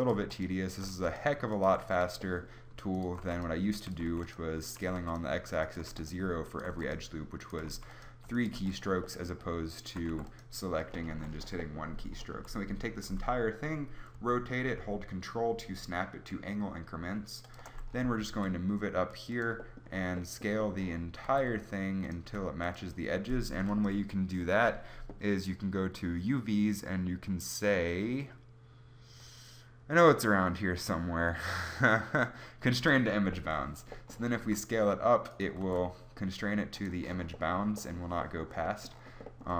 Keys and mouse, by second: 0.0-1.8 typing, 3.2-6.7 typing, 8.0 w, 8.6 w, 10.1 w, 11.1 a, 12.3 a, 13.2 r, 18.3 g, 21.3 s, 22.2 g, 34.4 s, 35.4 click, 35.6 s.